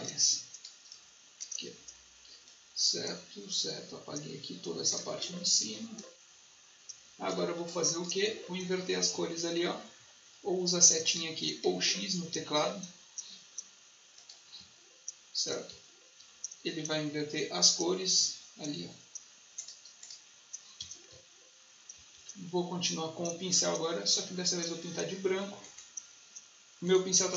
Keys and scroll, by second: 5.0 space, 7.4 space, 11.5 x, 14.5 x, 15.6 shift+x, 20.7 x, 21.8 b.